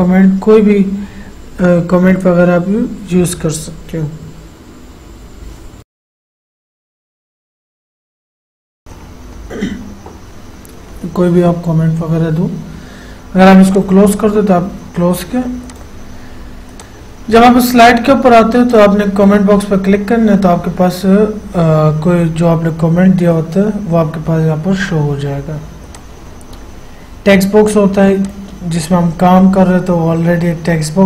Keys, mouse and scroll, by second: 5.5-9.0 typing, 11.1-11.8 typing, 13.9 click, 26.1 click, 28.4 click.